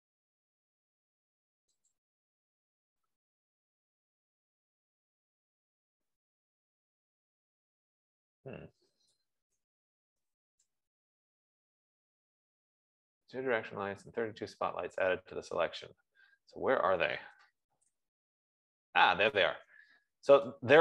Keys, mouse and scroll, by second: 2.6 click, 7.6 scroll down 2, 8.3-8.8 scroll down 3, 8.8-9.8 scroll down 2, 9.7-11.0 typing, 11.1 Return, 15.4 middle click, 16.3-20.8 middle drag, 16.3 scroll, 16.3 typing, 17.6 scroll, 19.2-19.5 scroll, 19.5 z.